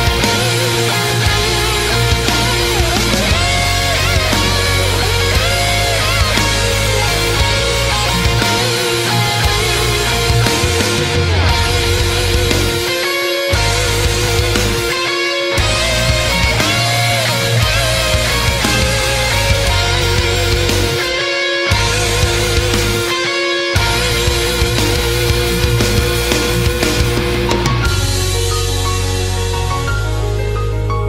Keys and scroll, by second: 1.5 space, 4.1 space, 6.3 ctrl+z, 6.6 ctrl+z, 7.7 ctrl+z, 11.0 space, 11.7 space, 11.9 space, 12.2 space, 17.2 ctrl+z, 19.2 space, 19.4 space, 20.3 space, 24.4 space.